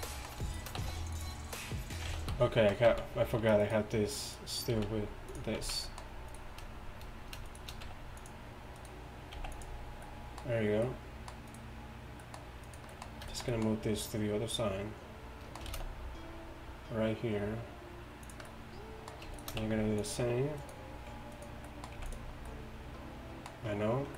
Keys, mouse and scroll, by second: 0.0 Tab, 0.0 z, 0.9 q, 2.4 ctrl+z, 2.9 z, 3.5 z, 4.8 z, 7.9 z, 8.4 q, 9.4 x, 11.3 q, 15.8 shift+d, 20.6 q, 22.0 x.